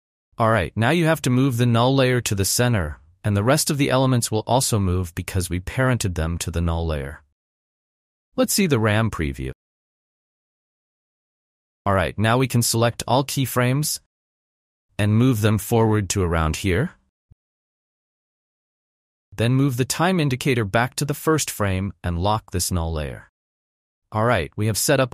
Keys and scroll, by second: 0.5 ctrl+z, 2.2 shift+Down, 2.9 shift+Down, 3.6 shift+Down, 4.6 shift+Down, 9.2 n, 9.4 space, 12.7 space, 18.9 n.